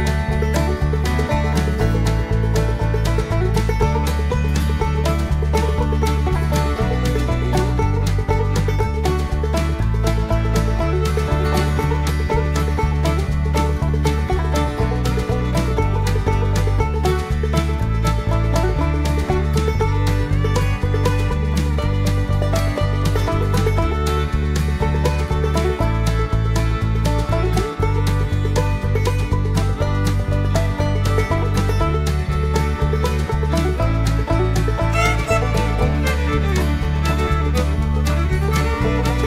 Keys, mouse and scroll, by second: 1.2 click, 2.4 click, 3.5 click, 6.2 click, 7.1 click, 7.9 click, 9.1 0, 9.3 click, 9.6 0, 9.8 click, 11.5 click, 12.4 click, 12.7 0, 13.0 click, 13.4 0, 13.7 click, 14.4 0, 15.0 click, 15.6 scroll down 1, 16.0-18.4 middle drag, 18.4 0, 18.8-19.2 scroll down 2, 19.2 scroll up 2, 20.2 scroll up 2, 21.3 click, 22.1 click, 24.0 click, 26.0 click, 27.2 click, 29.1 click, 30.4 click, 32.0 click, 33.6 click, 35.0 click, 37.0 click, 38.6 click.